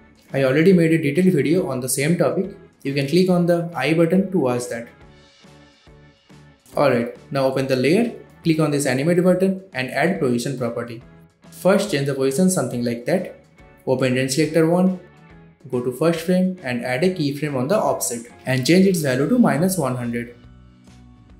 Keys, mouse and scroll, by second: 2.0-3.5 scroll down 1, 3.8 shift+click, 4.1 ctrl+alt+Home, 4.3-4.7 click, 4.8 shift+click, 11.9-13.5 drag, 16.7-17.0 click, 19.4-20.7 typing, 21.0 Return.